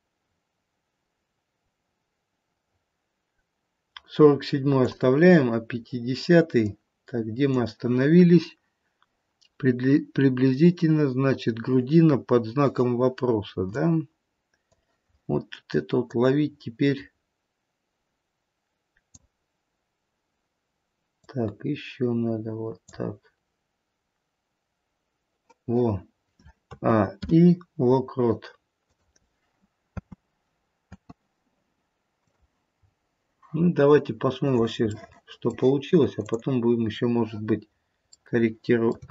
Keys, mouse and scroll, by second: 6.7 click, 13.7 click, 16.1 click, 21.1 click, 26.7 a, 27.0 i, 29.9 space, 30.8 space, 32.2 click, 32.6-33.9 scroll down 4, 34.5 click, 34.9 middle click, 36.2 click, 37.7 scroll up 1, 38.2 middle click, 38.8 middle click.